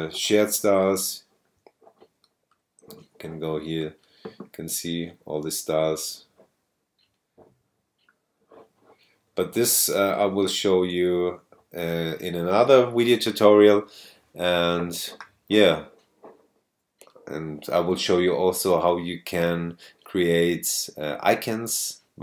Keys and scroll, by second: 10.4 super+space.